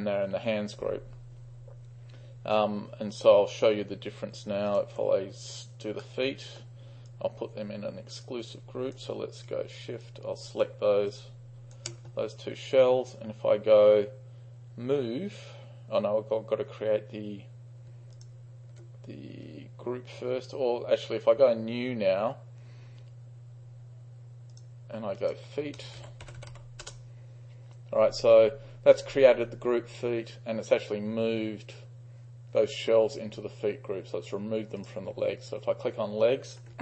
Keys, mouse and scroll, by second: 4.7 ctrl+click, 6.1-6.7 middle drag, 7.2-9.1 drag, 10.1-10.7 shift+drag, 11.2-11.9 shift+drag, 18.2 ctrl+click, 24.6 click, 25.3 click, 25.8-27.0 typing, 28.0 click, 28.8 click, 34.9-36.7 drag.